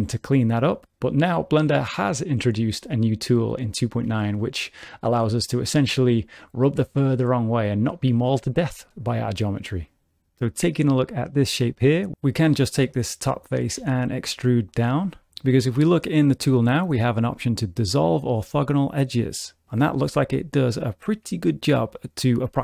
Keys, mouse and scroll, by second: 0.3 middle click, 1.9 shift+middle click, 3.4 scroll down 1, 3.7 shift+middle click, 11.7 click, 12.1 shift+middle click, 13.8 e, 18.2 click, 20.3 shift+middle click.